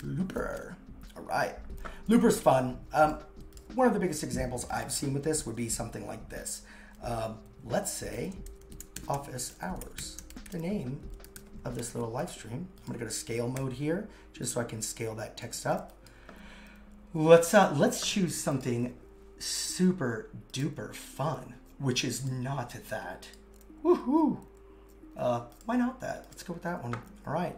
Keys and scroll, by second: 8.1 shift+o, 9.3 shift+h, 10.3 shift+h.